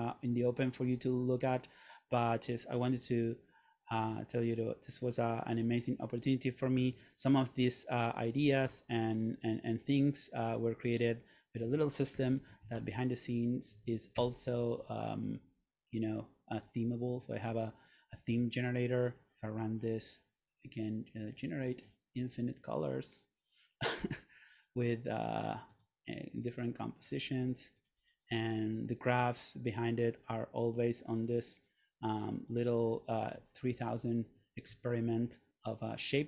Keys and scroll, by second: 12.3 super+/, 12.4-13.4 typing, 13.8 Down, 14.3 Return.